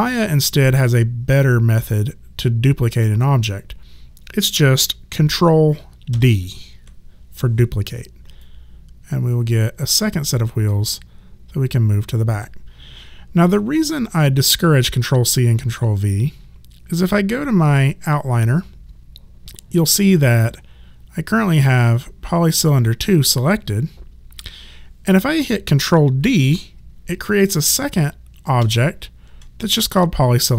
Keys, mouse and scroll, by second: 6.1 ctrl+d, 8.4 click, 17.3 click, 28.6 ctrl+d.